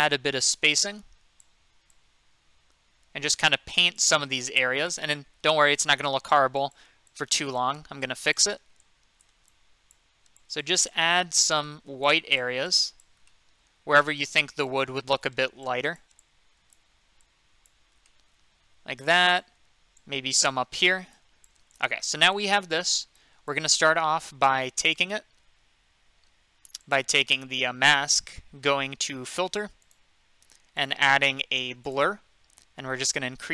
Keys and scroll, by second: 14.1 ctrl+z.